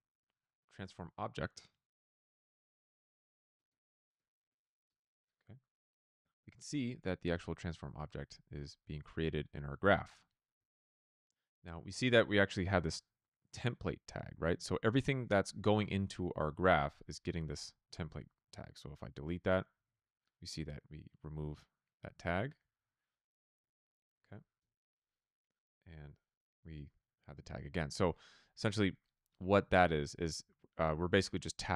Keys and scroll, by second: 0.0-0.9 typing, 2.3-4.8 typing, 6.5 Return, 19.7 BackSpace, 19.7 Return, 23.1-24.6 typing.